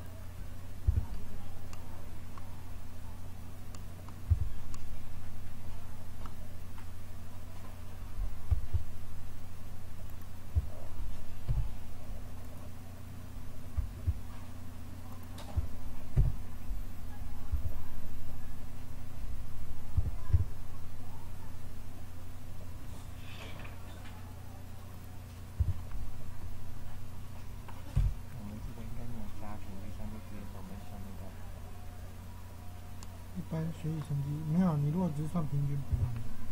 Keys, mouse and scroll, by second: 0.8 a, 4.2 z, 10.0-11.4 drag, 11.4 Delete, 15.0-16.1 drag, 16.1 KP_7, 17.4 z, 19.9 e, 25.5 f, 27.9 KP_1, 35.3 middle click, 35.8 f.